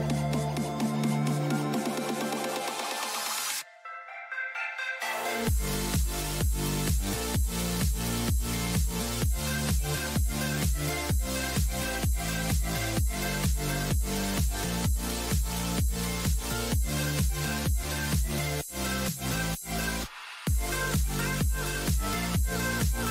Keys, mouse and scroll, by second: 2.6-4.3 middle drag, 12.5 n, 16.0-17.5 middle drag, 17.5 middle click, 17.9-23.1 middle drag.